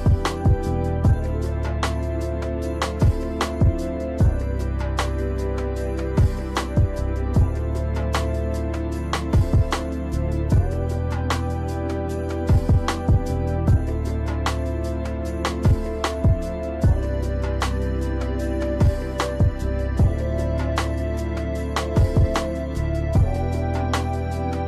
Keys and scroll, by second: 5.0 space, 6.9 space, 11.9 space, 14.0 space, 15.7 space, 16.5 space, 19.1 ctrl+z, 20.0 space, 20.7 space.